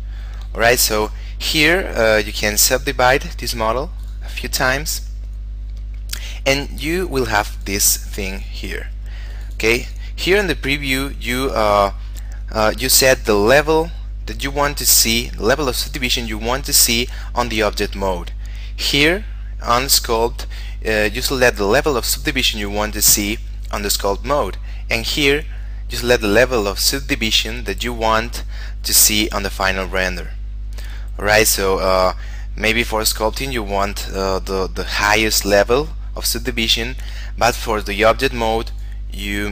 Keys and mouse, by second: 2.6 click, 7.7 click, 38.9 click.